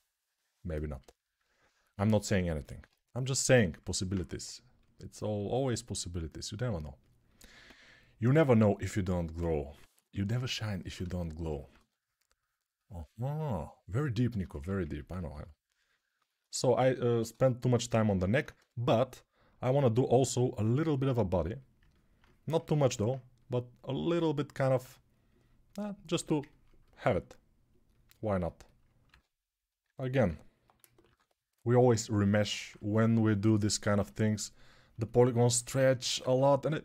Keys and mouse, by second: 9.6 1, 10.8-26.1 shift+drag, 11.6 2, 15.1 g, 18.3 g, 28.9 ctrl+r, 29.8-36.8 alt+drag, 30.8 6.